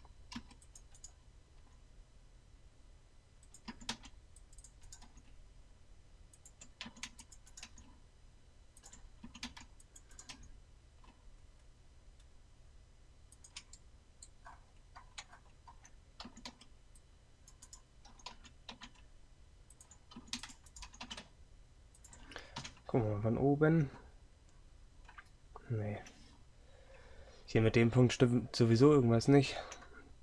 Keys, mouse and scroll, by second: 0.5 c, 3.8 a, 7.0 a, 9.3 a, 16.3 a, 20.2 a, 22.7 KP_7, 24.7 KP_7.